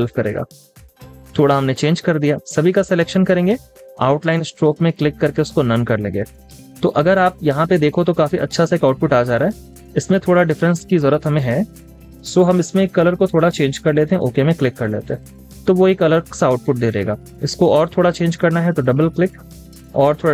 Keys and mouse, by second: 6.6 double click, 7.3 space, 7.4 double click, 7.8 space, 11.9 double click, 16.3 space, 19.4 double click.